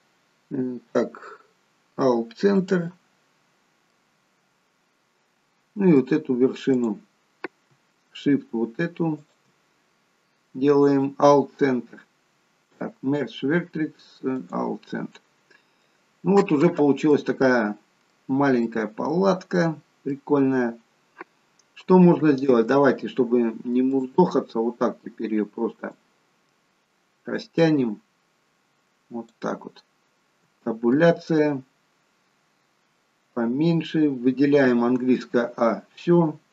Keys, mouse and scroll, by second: 3.8 middle click, 6.7 click, 9.2 shift+click, 10.7 right click, 15.0 middle click, 17.0 middle click, 22.3 Tab, 23.9 click, 25.8 click, 30.4 Tab, 32.2-33.3 scroll down 4, 33.3-34.5 scroll down 1, 34.7 a.